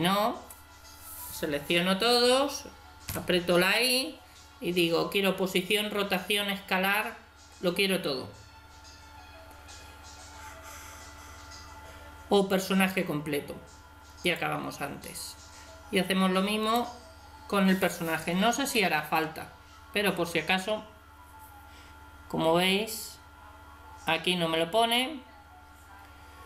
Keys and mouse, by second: 3.1 i, 16.6 right click, 18.6 i.